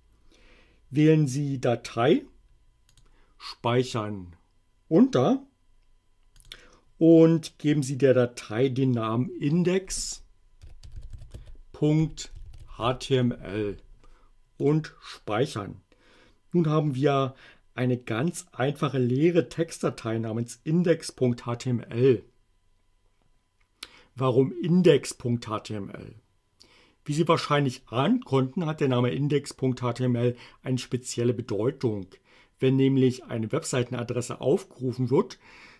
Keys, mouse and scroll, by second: 2.9 click, 6.4 click, 10.4-13.3 typing, 14.6 click.